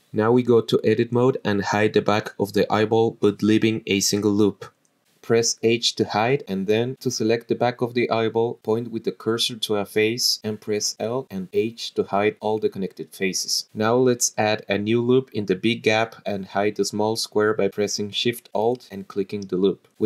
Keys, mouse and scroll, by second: 0.5-1.5 drag, 2.0 click, 2.7 click, 4.0 click, 5.3 alt+shift+click, 5.7 alt+shift+click, 7.4 h, 8.0 click, 8.6 alt+shift+click, 10.4 h, 11.1 click, 11.5 l, 11.8 h, 14.3 click, 15.8 click, 16.5 click, 17.6 click, 18.2-19.1 scroll up 5, 18.4 shift+middle click, 19.1 alt+shift+click, 19.9 h.